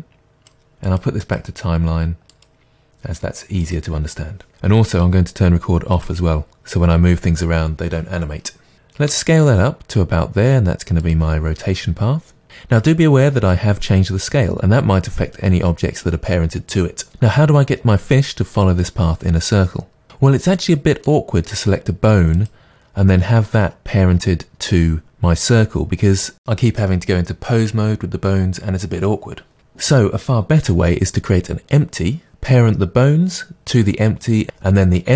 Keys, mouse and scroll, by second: 0.1 click, 1.2 click, 3.7-6.0 drag, 8.7-9.1 scroll up 1, 9.1 s, 11.1 click, 17.1-22.4 middle drag, 21.3-22.4 scroll up 2, 22.4 click.